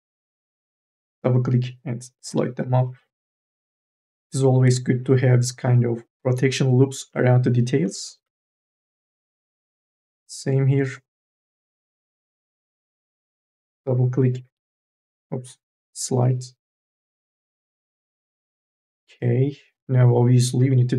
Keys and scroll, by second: 0.1 2, 0.6 e, 2.1 m, 2.5 o, 3.6 3, 4.4 2, 4.6 e, 10.8 1, 13.1-14.7 typing, 15.9 o.